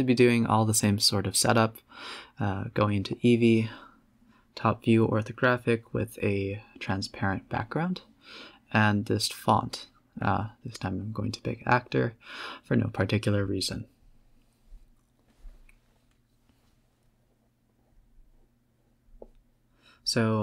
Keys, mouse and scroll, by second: 0.0-0.9 typing, 0.2 Tab, 3.6 click, 4.4 click, 8.4-8.9 scroll up 3, 8.9 scroll down 3, 9.2 g, 9.7 z, 10.0 a, 10.2 a, 10.5 click, 11.3 click, 11.7 drag, 12.6 click, 15.6 a, 15.7 a, 16.3 click, 16.8 g, 18.7 click, 19.3 click.